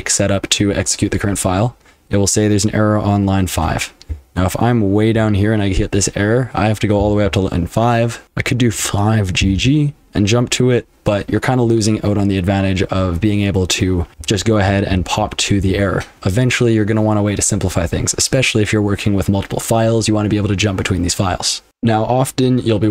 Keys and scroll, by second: 3.6-5.0 typing, 7.0-9.6 typing, 8.2 Escape, 10.7-11.4 typing, 13.9-16.1 typing, 21.7 F12.